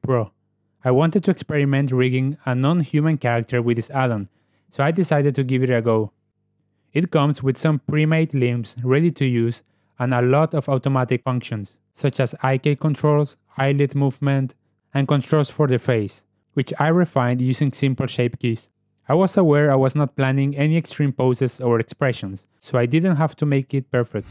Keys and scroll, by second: 0.2 g, 11.9 n, 12.2 g, 13.6 ctrl+w, 13.9 g, 20.1 g, 20.7 r, 21.9 r.